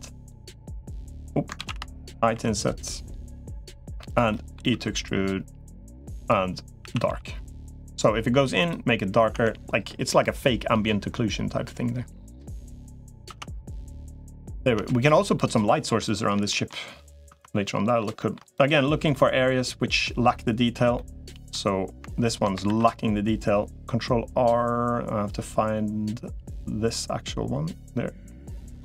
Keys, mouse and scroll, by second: 1.4 ctrl+z, 2.2 i, 4.1 middle click, 4.6 e, 6.6 a, 6.8 g, 8.4 click, 9.2 Tab, 9.9-12.6 middle drag, 13.2 Tab, 13.9 middle click, 14.6 Tab, 15.1 middle click, 16.3 shift+middle click, 17.2 Tab, 17.4 middle click, 18.0 shift+middle click, 18.9 middle click, 20.7 middle click, 22.4 ctrl+r.